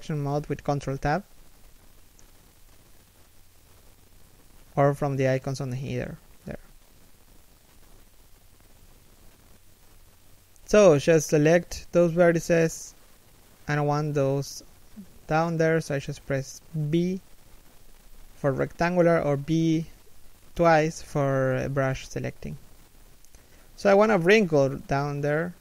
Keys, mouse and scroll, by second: 3.2 Tab, 9.0 alt+right click, 10.0 alt+shift+right click, 11.2 b, 13.5 b, 16.8 alt+shift+middle click, 17.1 scroll up 1, 17.8 alt+shift+middle click, 19.1-19.6 scroll up 1.